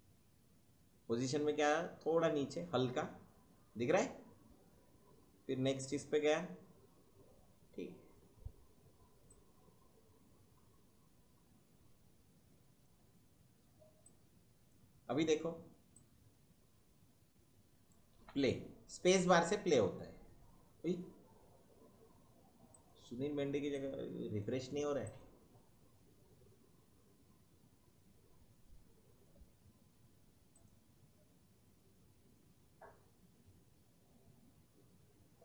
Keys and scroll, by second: 18.2 space, 20.9 space, 25.4 space, 29.1 space, 30.9 space, 34.1 space.